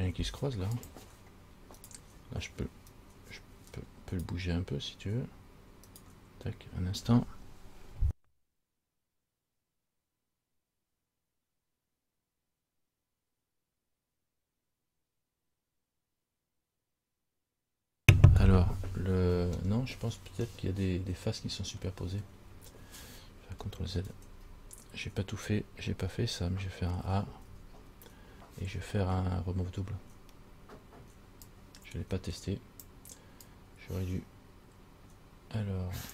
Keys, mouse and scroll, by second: 1.0 click, 2.0 right click, 3.1 right click, 19.9-20.5 scroll down 1, 20.5 scroll down 2, 20.8 middle click, 22.6-23.7 scroll up 2, 24.3 ctrl+z, 25.6-26.2 scroll down 4, 27.3 a, 27.8 a, 31.6 click, 33.6 click.